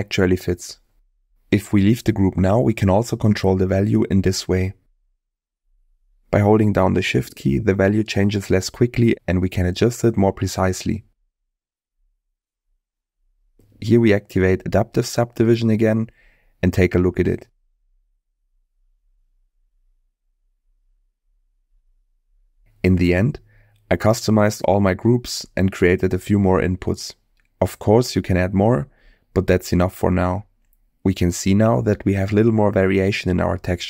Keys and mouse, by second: 0.9 click, 3.9-6.2 drag, 6.3 click, 7.5-13.6 shift+drag, 16.0 click, 17.5-18.0 middle drag, 24.3 middle click, 28.6 middle click, 32.0 shift+middle click.